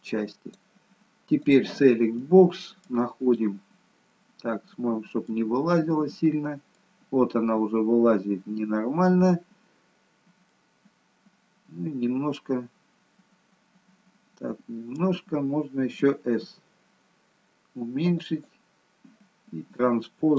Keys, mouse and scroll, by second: 1.5 click, 2.0 scroll up 1, 2.2 middle click, 3.4 middle click, 10.5 middle click, 16.5 s.